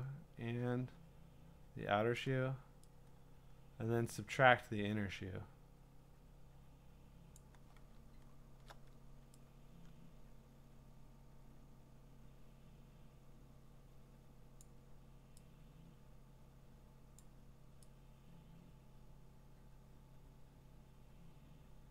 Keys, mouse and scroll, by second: 2.1 click, 7.3 click, 8.0-8.7 scroll, 14.6 alt+click, 14.6-14.9 scroll, 17.2 alt+click.